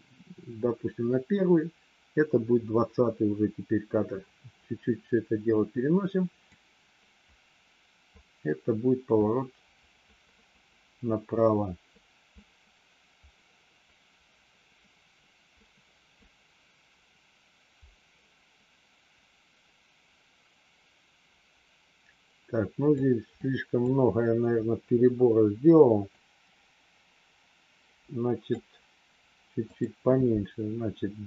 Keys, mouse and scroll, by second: 6.6-23.0 drag, 23.3 click, 24.8 Delete, 24.8 BackSpace, 26.1-28.6 drag, 29.7 click.